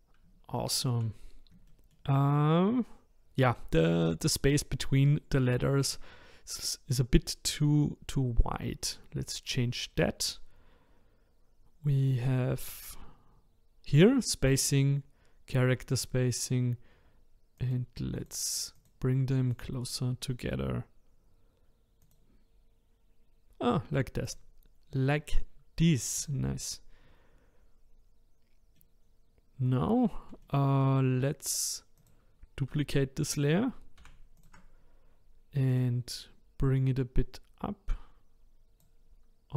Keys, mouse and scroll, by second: 0.6-1.1 shift+middle drag, 1.1-1.6 scroll up 1, 1.6-4.7 shift+middle drag, 8.8-10.6 scroll down 3, 10.6-11.9 scroll down 1, 12.1-15.1 drag, 17.6-24.3 drag, 26.2 click, 28.8-30.0 middle drag, 30.0-30.4 scroll down 2, 30.4-31.9 shift+middle drag, 31.9 click, 34.0 shift+d, 35.7-37.1 drag.